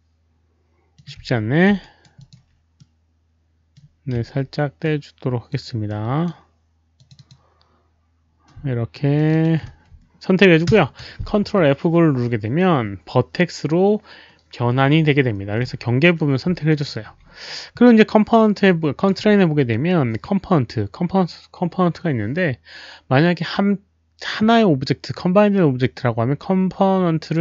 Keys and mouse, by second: 0.9 ctrl+F9, 0.9 shift+click, 0.9 alt+right click, 1.1 z, 1.7 alt+right drag, 2.1 alt+shift+click, 2.8 middle click, 3.7 ctrl+F9, 3.7 shift+click, 3.7 alt+right click, 3.7 z, 4.8 alt+click, 5.8-6.2 alt+right drag, 6.9 alt+click, 7.1 click, 9.1 alt+shift+click, 9.1 alt+right click, 9.1 middle click, 9.1 z, 10.6 ctrl+F9, 14.9 shift+click, 14.9 right click, 16.6 ctrl+F9, 16.6 alt+right click, 16.6 shift+click, 18.6 ctrl+F9, 18.6 shift+click, 18.6 alt+right click.